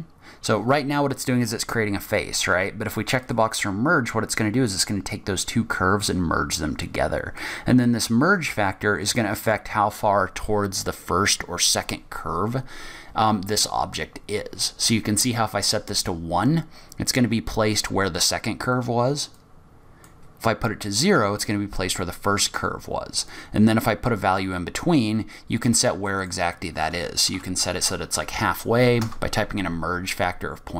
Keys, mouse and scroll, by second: 1.0-2.5 scroll up 1, 2.5-3.2 scroll up 1, 3.2 click, 7.4 click, 19.3 click, 23.2 click, 26.1 click.